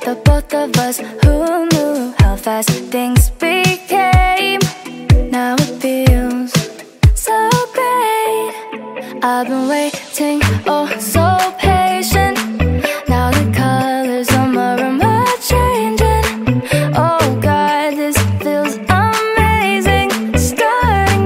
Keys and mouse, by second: 0.1 alt+click, 1.0 alt+middle click, 1.2 alt+click, 1.4 click, 2.2 1, 2.5 click, 4.8 click, 5.3 click, 6.0 click, 6.3 alt+right click, 6.8 alt+click, 7.8 click, 8.9 click, 10.3 click, 10.6 right click, 12.5 click, 16.7 click, 17.6 click, 18.3 click, 18.7 click, 19.5 click, 19.9-20.8 typing, 19.9 click, 20.3 click, 20.8 click.